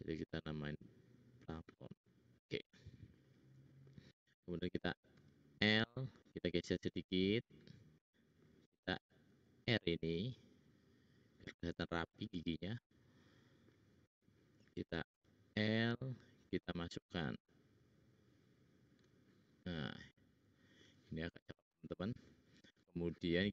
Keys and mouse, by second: 2.9-4.3 middle drag, 5.2 l, 8.0 middle click, 9.3 ctrl+r, 15.1 l, 16.1 click, 16.1 middle click, 16.1 right click, 19.6 click.